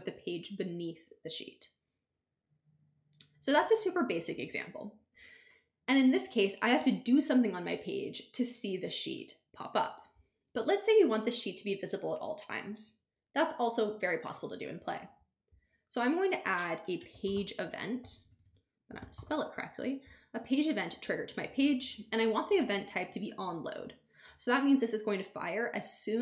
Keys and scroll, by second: 16.7-19.7 typing.